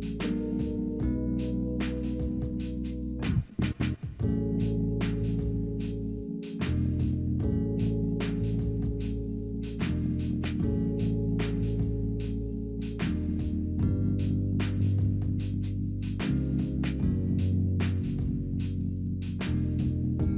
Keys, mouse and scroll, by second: 0.6 scroll down 2, 2.9 alt+middle click.